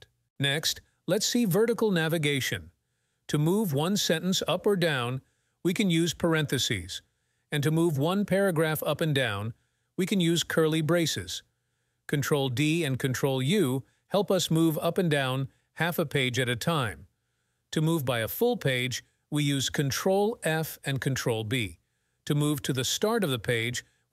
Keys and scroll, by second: 4.4 shift+9, 5.1 0, 8.2 shift+[, 9.4 ], 11.2 ctrl+d, 12.5 ctrl+d, 13.5 ctrl+u, 14.5 ctrl+u, 16.9 ctrl+f, 20.1 ctrl+b.